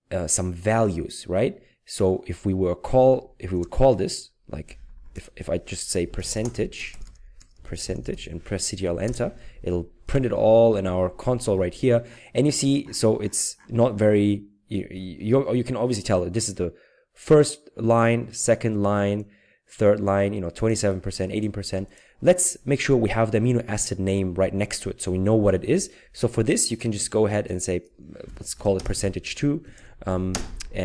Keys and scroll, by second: 3.5 Return, 5.7-9.5 typing, 28.2 typing, 29.6 typing.